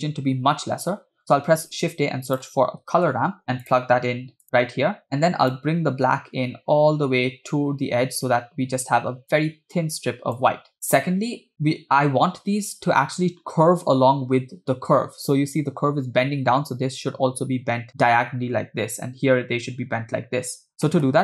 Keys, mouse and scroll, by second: 1.5 shift+a, 5.5-10.7 drag, 11.4-11.7 scroll up 2, 20.9 middle click.